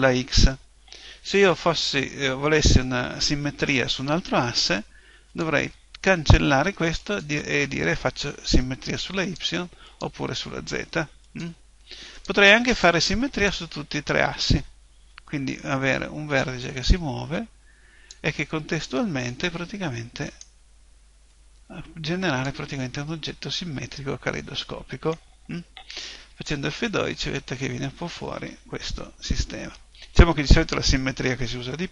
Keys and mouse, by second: 2.7-5.3 middle drag, 5.3-9.1 drag, 18.5-20.3 middle drag, 20.3 right click, 21.3 click, 24.1 middle click, 28.4 F12, 28.4 Escape, 29.3-31.1 middle drag.